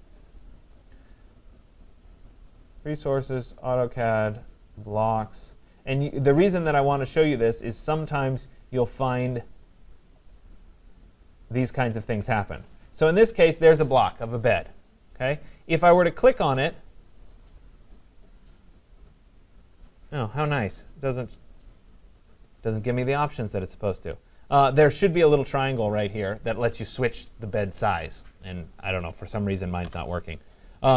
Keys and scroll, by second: 29.8 Delete.